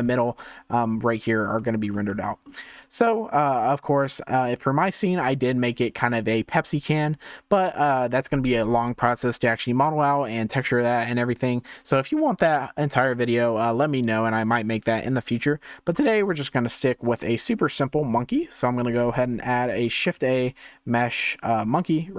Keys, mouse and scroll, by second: 0.0 click, 0.4 scroll up 3, 1.5-2.1 scroll down 1, 2.1-6.7 shift+middle drag, 16.0 KP_0, 17.2-19.8 shift+middle drag, 19.8 shift+a.